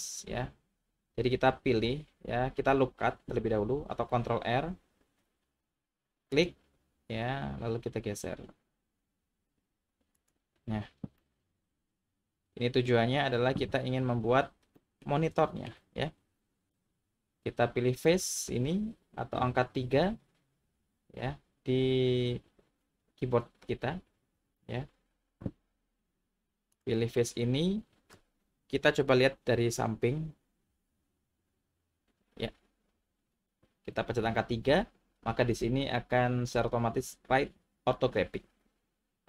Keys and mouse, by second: 5.1 ctrl+r, 10.2 click, 11.2-12.8 middle drag, 14.9 middle click, 15.4 shift+middle click, 24.3 3, 26.7 click, 31.7 KP_3.